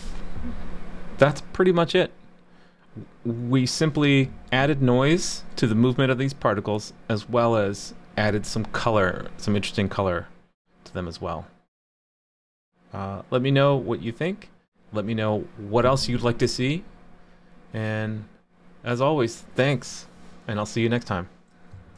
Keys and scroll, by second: 21.9 shift+super+2.